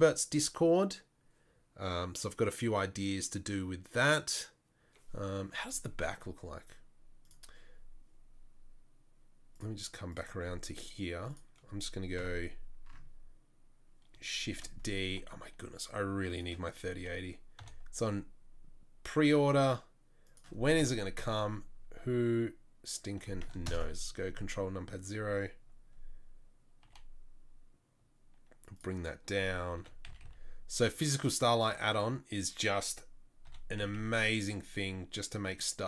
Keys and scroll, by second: 12.4 KP_7, 15.0 shift+d, 18.2 r, 21.3 KP_0, 24.2 ctrl+KP_0, 27.3 g, 30.1 r, 33.7 r.